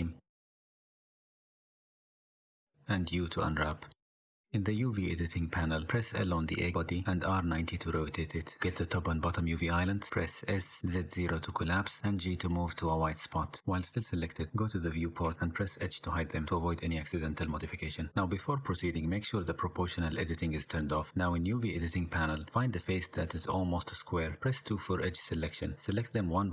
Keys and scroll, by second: 1.4 KP_5, 1.6 ctrl+KP_3, 2.8 u, 3.0 u, 4.6 l, 5.3 g, 6.3 r, 7.4 l, 8.9 l, 10.0 s, 10.9 g, 15.3 3, 15.8 h, 16.6 KP_5, 16.7 KP_1, 22.3 s, 24.0 s, 25.8 3.